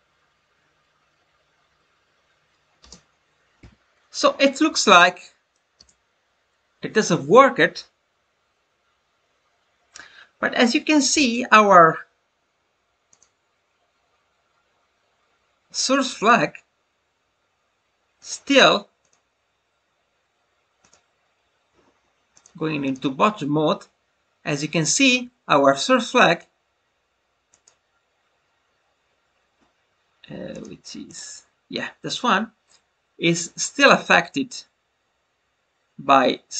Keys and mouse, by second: 4.6 middle click, 16.1 click, 18.9 click, 22.2 click, 27.5 click, 30.4 click.